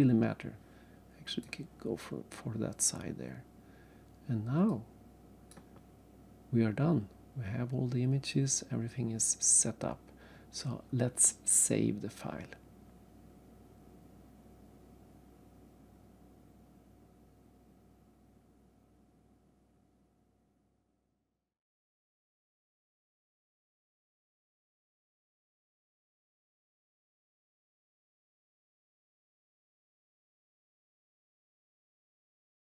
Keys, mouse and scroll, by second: 2.0-2.3 scroll down 1, 4.7 click, 5.8-6.2 scroll down 1, 6.8-7.2 scroll down 1, 7.7-8.0 scroll up 1, 8.6 scroll up 2, 9.6 scroll up 1.